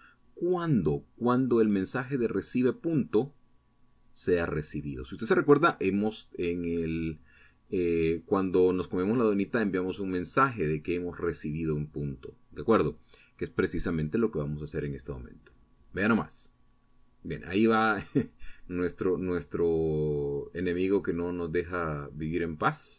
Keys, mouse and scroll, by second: 3.1-5.5 drag, 8.4 0, 10.4 p, 12.7 Down, 14.4 Right, 15.3 Left, 15.7 Up, 18.3 Left, 19.3 Up, 20.8 Right, 22.1 Down.